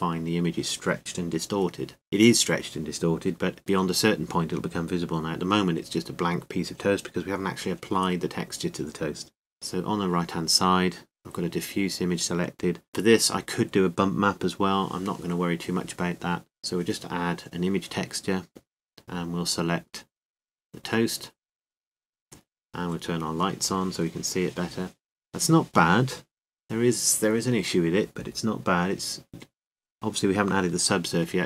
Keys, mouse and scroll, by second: 0.0 Tab, 0.0 g, 3.6-5.0 drag, 6.8 Tab, 11.1-19.5 drag, 22.9-31.4 drag.